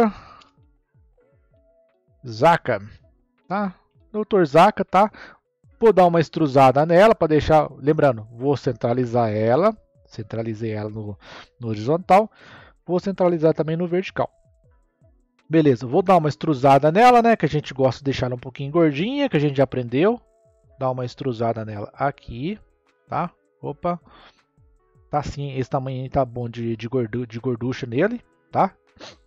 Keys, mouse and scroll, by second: 0.3 space, 2.5 a, 2.8 k, 2.9 a, 3.8 Tab, 6.3 click, 8.2-11.2 drag, 12.0-14.8 drag, 14.8 scroll up 1, 16.5-22.8 drag, 25.6-26.4 scroll up 1, 26.4-29.2 middle drag.